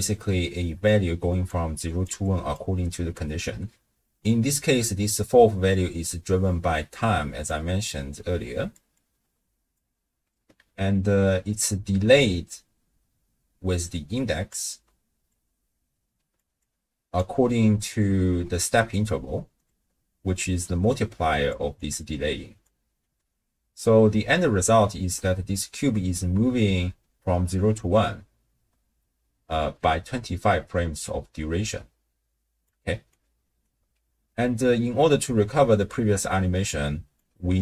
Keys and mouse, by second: 0.8 click, 1.8 click, 2.0 d, 2.2-2.8 d, 3.0 d, 7.0-10.1 d, 7.5-8.7 drag, 8.9 click, 11.0 d, 13.6-19.5 d, 13.9 click, 15.3-16.4 drag, 17.0 click, 19.7-21.5 drag, 19.7-22.9 d, 22.0 click, 23.8 d, 26.5 space, 27.7 space, 30.1-33.1 d, 32.0 click, 33.4 click, 33.6 d, 34.3 middle click, 34.3 d, 36.6 click.